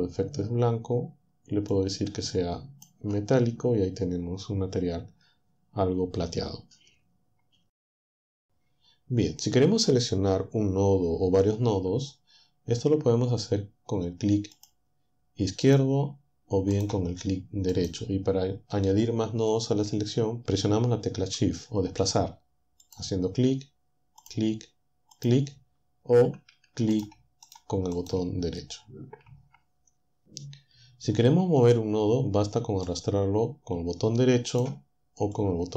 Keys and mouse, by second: 1.7-3.1 drag, 13.8 click, 14.9-16.0 drag, 16.0 right click, 17.0-19.6 right drag, 22.1 shift+click, 23.4 shift+click, 24.3 shift+click, 26.1 shift+right click, 26.7 shift+right click, 32.1-33.9 right drag, 34.5-35.7 drag.